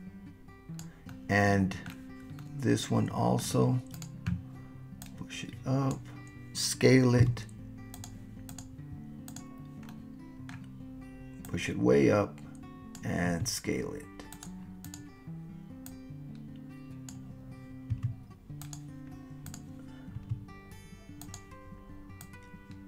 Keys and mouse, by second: 0.6 click, 1.1-1.9 drag, 2.4-3.5 middle drag, 3.9 click, 5.1 click, 7.2 s, 7.9 click, 8.5 click, 9.9-10.5 middle drag, 11.5-12.9 drag, 13.3 s, 14.3 click, 15.9 click, 16.4 click, 16.9 click, 17.9 s, 18.6 click, 20.2 s, 21.2 click, 22.2-22.8 drag.